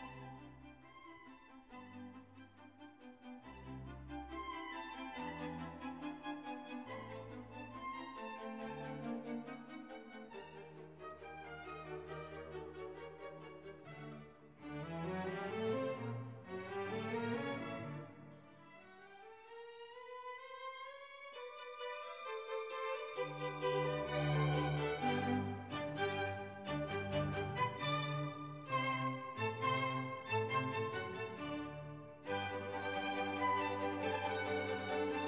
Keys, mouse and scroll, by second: 2.3-6.8 typing, 7.1 ctrl+a, 9.1 click, 10.3 click, 11.8 click, 12.6 click, 14.4 click, 14.9 ctrl+a, 15.9 click, 16.9 click, 17.8 8, 18.1 Return, 20.9 click, 22.4-27.0 drag, 31.3 click, 32.6 click, 33.6-35.2 typing.